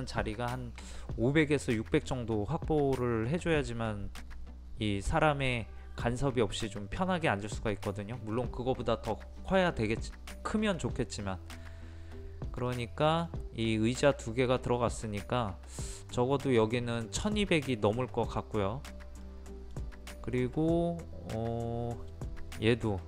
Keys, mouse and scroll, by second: 12.7-20.7 middle drag.